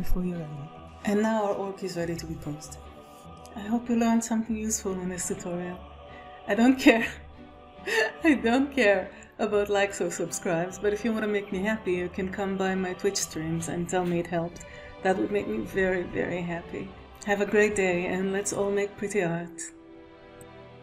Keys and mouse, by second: 2.3 ctrl+Tab, 2.4-20.0 typing, 3.1 click, 3.5 middle click, 4.4 middle click, 4.7 shift+click, 6.1 click, 6.1 middle click, 6.1 right click, 6.2 click, 6.2 middle click, 6.2 right click, 6.7 click, 6.9 shift+click, 7.4 right click, 8.1 alt+shift+z, 8.5 alt+r, 9.0 shift+click, 9.0 ctrl+Tab, 9.3 click, 10.1 alt+a, 10.3 click, 10.5 click, 10.7 click, 10.8 click, 11.1 click, 12.6 click, 13.0 right click, 13.1 click, 13.3 shift+click, 13.5 click, 14.5 ctrl+s, 14.8-15.9 middle drag, 16.4 click, 17.3 ctrl+s, 17.4 ctrl+shift+Tab, 17.6 ctrl+s, 18.1 click, 18.2 F5, 18.5 click, 19.1 click.